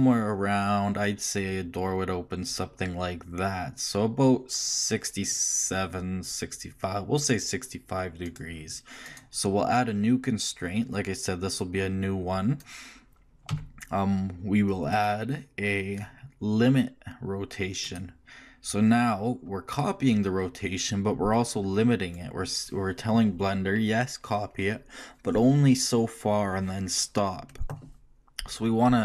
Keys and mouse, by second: 9.1-10.9 drag, 13.5 n, 21.3-29.0 drag.